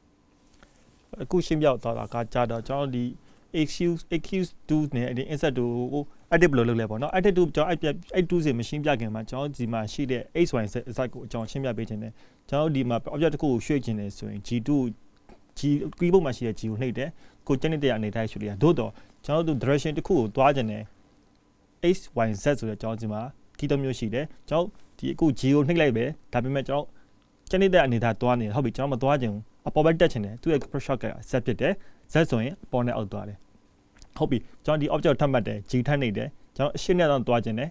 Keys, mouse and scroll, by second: 3.3 ctrl+z, 3.9 ctrl+z, 4.4 ctrl+z, 5.5 middle click, 8.6 e, 18.2 e, 31.6 shift+middle click, 37.4 shift+middle click.